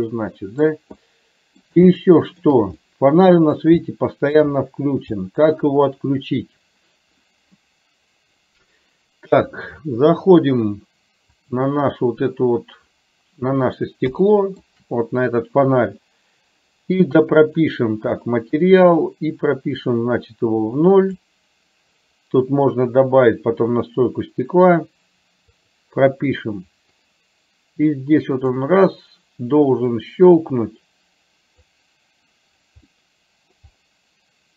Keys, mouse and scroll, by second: 0.0 middle click, 1.1 middle click, 2.1 shift+middle click, 3.0 middle click, 4.0 shift+middle click, 5.3 middle click, 14.3 shift+middle click, 18.3 click, 20.0-21.2 drag, 25.7 click, 27.2-28.7 drag, 30.2-31.7 drag, 33.1 middle click.